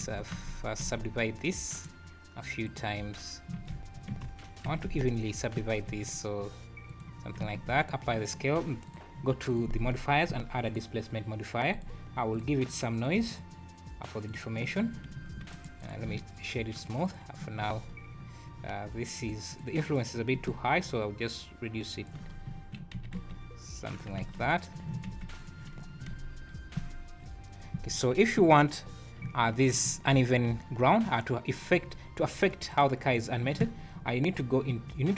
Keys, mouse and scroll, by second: 0.1 scroll up 5, 0.6 alt+a, 0.6 scroll down 1, 1.7 right click, 3.5 ctrl+z, 4.1 Tab, 4.6 s, 7.5 ctrl+a, 8.8 click, 9.5 click, 11.7 click, 12.3 click, 12.7 click, 13.3 click, 15.1 `, 15.5 right click, 16.7 click, 17.0 click, 17.5 `, 17.9 scroll up 3, 19.2 click, 19.5 click, 20.8 shift+click, 22.3 scroll down 2, 22.9 s, 24.2 ctrl+a, 25.1 x, 25.8 `, 26.1 space, 26.8-27.1 scroll down 4, 27.6 scroll up 4, 28.0 Escape, 29.2 `, 29.6 click, 29.8 `, 30.2 `, 31.9-32.6 scroll up 3, 32.7 click, 33.1 click.